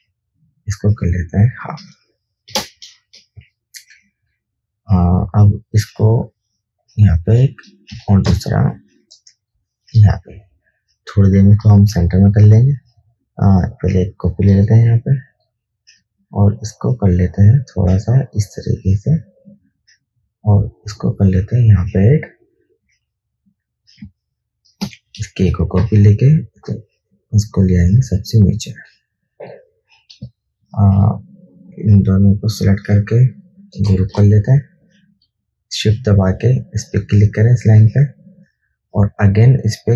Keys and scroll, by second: 2.8 Delete, 3.6 v, 8.1 alt+Down, 24.3 alt+space, 25.6-26.0 typing, 25.8 alt+shift+Down, 30.5 space, 34.2 ctrl+g.